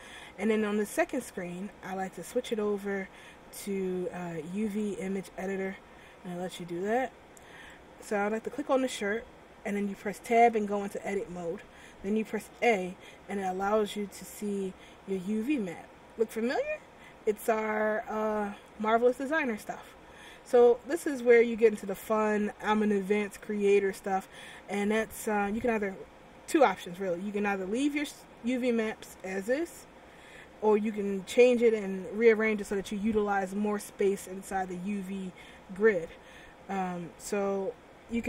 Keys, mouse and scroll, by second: 2.2 click, 7.9 right click, 10.7 Tab, 12.6 a, 15.0-15.5 scroll up 3, 15.6 scroll up 1, 16.2 middle click, 17.9 scroll down 1, 19.3 scroll down 2, 19.7 scroll up 2, 22.7 click, 37.4 click.